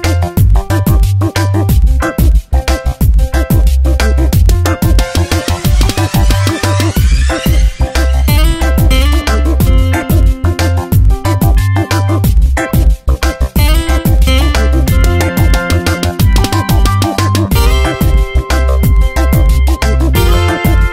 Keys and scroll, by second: 1.4 space, 7.0 ctrl+z, 9.5 space, 12.8 space, 15.1 space, 16.5 ctrl+z, 18.5 space, 20.8 space.